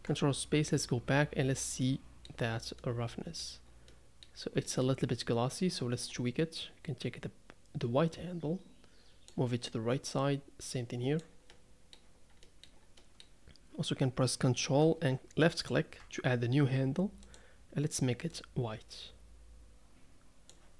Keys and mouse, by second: 0.0 ctrl+space, 1.8-2.4 middle drag, 2.8-3.4 middle drag, 3.9-4.4 middle drag, 6.6 drag, 6.9-9.3 middle drag, 10.2-10.7 middle drag, 10.7 right click, 11.5-12.0 middle drag, 12.5 middle click, 13.0-13.5 middle drag, 15.6 ctrl+click.